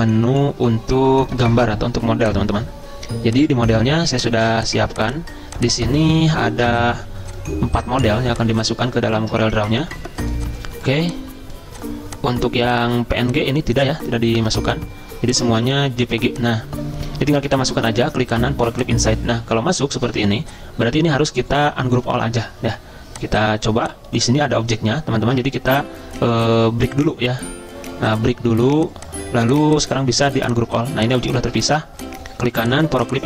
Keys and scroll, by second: 7.0 Caps_Lock, 8.9 alt+Tab, 9.2 alt+Tab, 9.9 typing, 14.3 Delete, 14.5 alt+Tab, 15.5 alt+Tab, 20.1 ctrl+z, 31.4 ctrl+z.